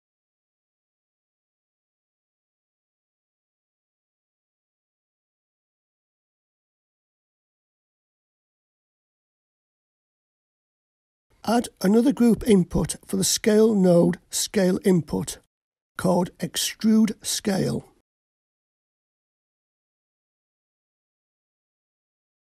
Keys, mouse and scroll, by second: 5.8-11.3 drag, 12.6-13.6 middle drag, 15.3-18.8 drag, 21.4-22.5 scroll down 2.